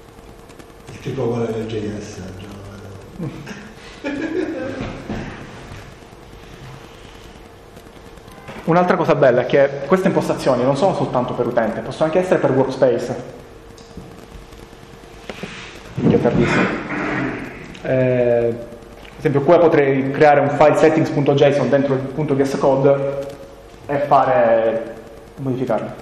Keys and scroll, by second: 0.3 BackSpace, 7.3 ctrl+-, 8.7 ctrl+-, 9.1 ctrl+s.